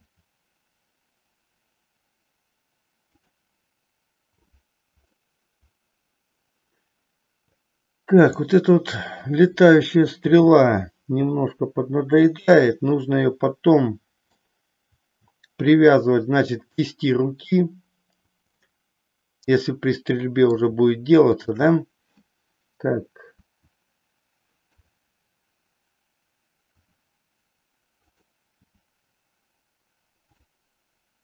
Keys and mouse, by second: 0.2 r, 3.2 click, 5.1-7.6 middle drag, 8.2 click, 10.3 g, 12.2 click, 12.7-14.5 middle drag, 18.6-20.6 middle drag, 21.2-22.3 shift+drag, 23.3 KP_1, 24.7 KP_3, 26.8 r, 28.7 g.